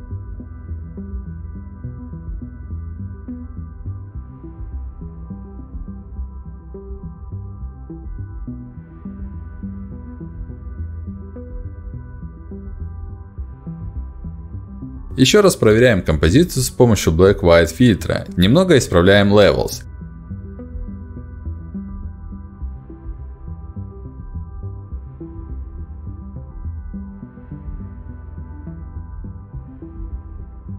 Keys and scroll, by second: 7.4 Up, 7.9 Down, 10.0 Up, 10.3 Down, 10.7 Up, 11.6 Down, 26.3 ctrl+m.